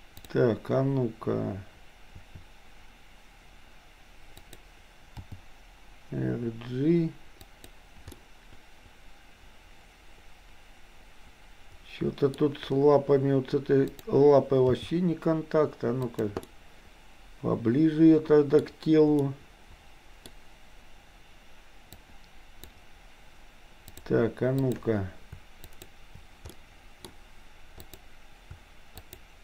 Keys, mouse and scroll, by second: 2.2 r, 5.2 g, 8.2-8.8 scroll up 2, 8.8-11.0 scroll up 1, 11.0-11.7 scroll up 1, 11.7-12.3 scroll up 1, 14.0 click, 14.7 g, 16.5-18.6 middle drag, 18.6-19.3 scroll down 2, 19.3-20.3 middle drag, 21.8-22.8 drag, 23.8 click, 24.6 click, 25.6 shift+click, 26.6 middle click, 27.8 click, 29.1 shift+click.